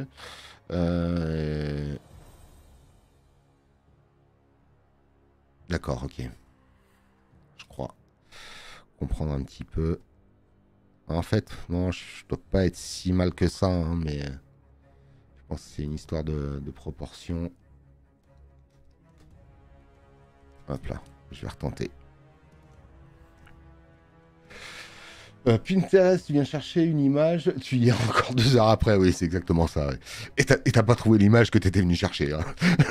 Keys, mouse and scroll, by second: 6.5 click.